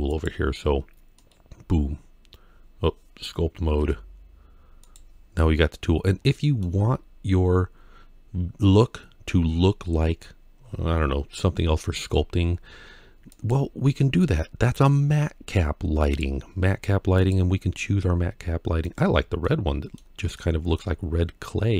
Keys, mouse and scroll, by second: 1.0 click, 3.6 ctrl+Tab, 6.0 middle click, 6.6 scroll down 1, 6.8-9.1 scroll up 2, 9.1-9.5 scroll up 1, 18.9 click, 19.2 middle click, 20.2 middle click.